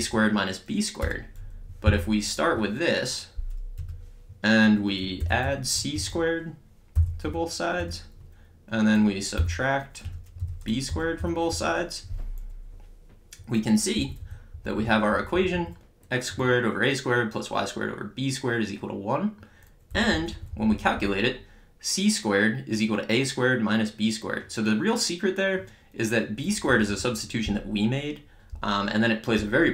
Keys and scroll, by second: 1.0 Return, 3.4 Return, 5.4 c, 6.9 ^, 7.2 2, 7.8 Return, 9.3-11.7 typing, 10.0 Return, 14.0 Up, 18.5 Up, 20.0 Down, 26.7 Up.